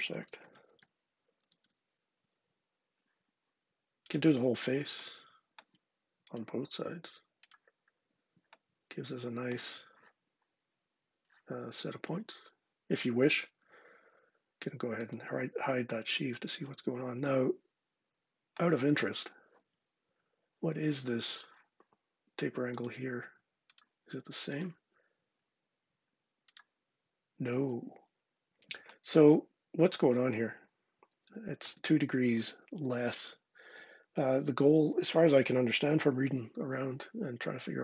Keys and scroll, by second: 0.0-1.1 typing, 1.2 Down, 1.5 Return.